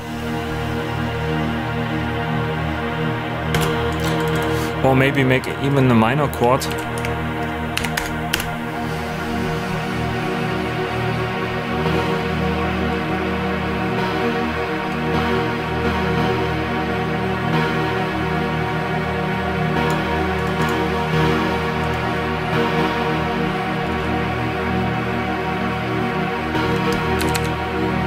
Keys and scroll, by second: 3.5 space, 6.6 super+a, 6.9 super+i, 7.7 5, 7.9 Return, 8.3 space, 26.3 space, 27.1 Down.